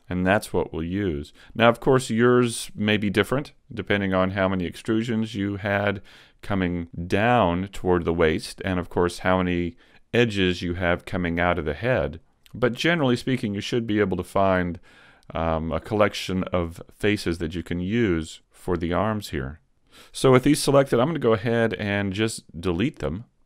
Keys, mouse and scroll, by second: 0.4 shift+middle click, 1.0 scroll down 1, 1.6 shift+middle click, 3.2 scroll up 1, 21.0 x.